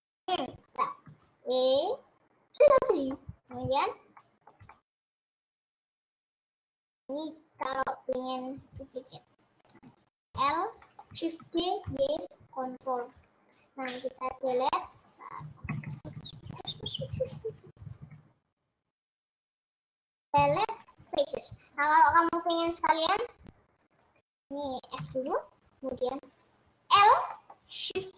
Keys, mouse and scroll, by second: 1.6 e, 3.3-6.8 middle drag, 6.8 click, 8.8 click, 9.8 click, 10.4 l, 11.2 middle click, 11.4 shift+d, 14.9 Left, 16.0-18.0 KP_Add, 18.2 KP_Add, 18.6 KP_Add, 19.0 KP_Add, 21.3 Delete, 22.8-24.0 drag, 25.0 f, 26.2 click, 27.0 l, 27.4 middle click, 28.0 scroll down 1.